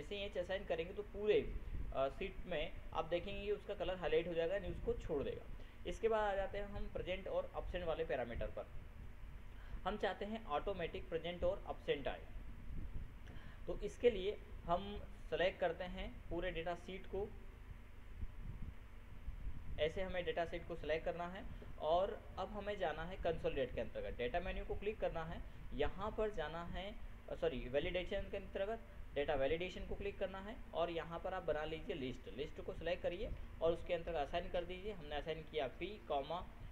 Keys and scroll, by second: 34.6 ctrl+shift+p.